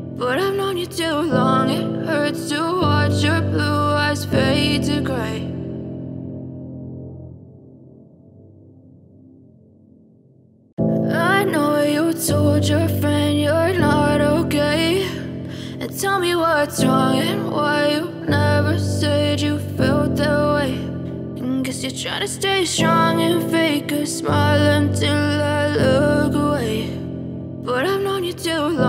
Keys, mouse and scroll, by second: 20.6 Delete.